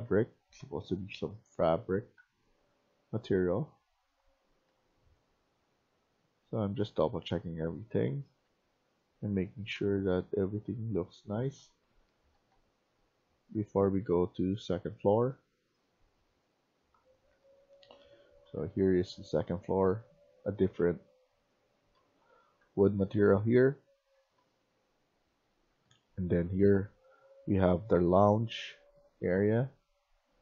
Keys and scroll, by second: 0.0-0.5 typing, 1.7-3.3 typing, 4.6-8.4 typing, 9.6-14.0 typing, 15.6 q, 17.3-24.3 typing, 26.0-29.4 typing.